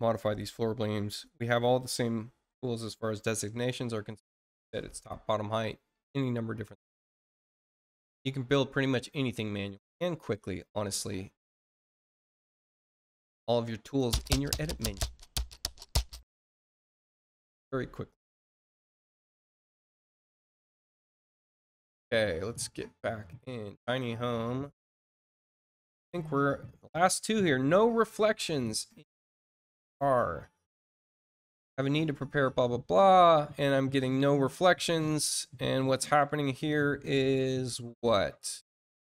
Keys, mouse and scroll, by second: 7.3-11.7 drag, 13.4 click, 21.1 click, 22.4 click, 23.7 click, 25.1-25.4 scroll down 1, 28.0 click, 29.9-30.5 scroll down 2, 33.0 click, 38.3 click, 39.0-39.1 scroll down 4.